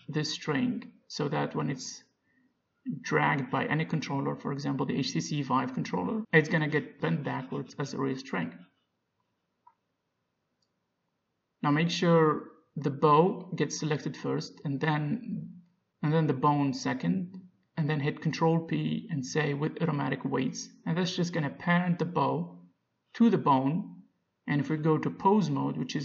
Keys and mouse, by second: 1.7-3.7 middle drag, 2.3 g, 4.1 g, 6.7 middle click, 7.5 Tab, 9.8 Tab, 15.0-18.5 drag, 18.9 ctrl+p, 23.7-26.0 drag.